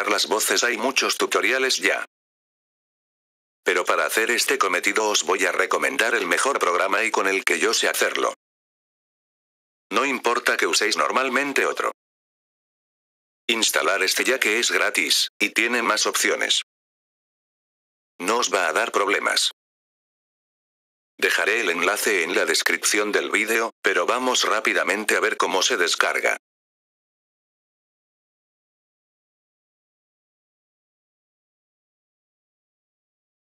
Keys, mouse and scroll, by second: 0.1 click, 2.9 click, 4.0 click, 6.5 click, 7.9 click, 9.5-10.5 drag, 11.7 click, 12.2-13.2 typing, 16.3-16.7 scroll down 1, 18.8-19.8 scroll up 2, 19.8-20.7 scroll up 1, 22.0-23.2 scroll down 2, 23.2-23.9 scroll down 1, 24.2-25.3 scroll down 2, 25.3-26.3 scroll down 1, 26.3 click, 30.9 F4.